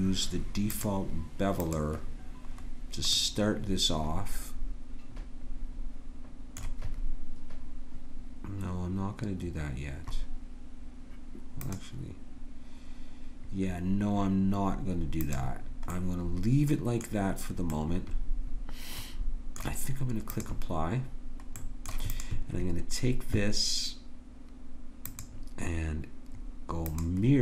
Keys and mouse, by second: 0.7-2.5 drag, 2.5 middle click, 3.1-5.1 drag, 11.6-14.3 drag, 15.2-16.8 drag, 16.8-19.6 middle drag, 20.3-24.3 drag, 25.0-27.0 drag.